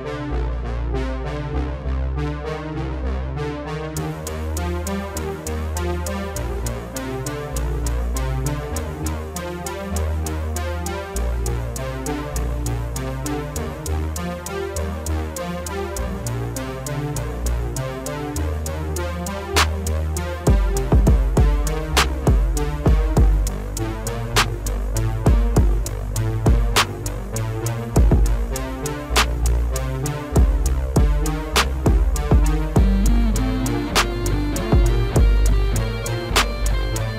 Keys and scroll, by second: 6.5 F3, 18.9 F3, 28.8 alt+w.